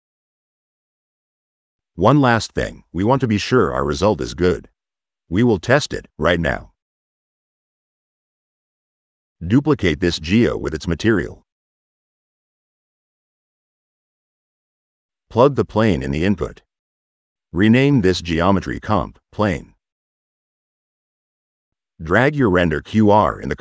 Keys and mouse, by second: 6.3 right click, 6.9 click, 7.7 click, 8.3 middle drag, 8.9 right click, 9.1 click, 9.7 ctrl+c, 10.1 v, 10.9-12.0 drag, 12.4 click, 12.8 drag, 13.3 click, 15.0 click, 16.0 click, 18.1 click.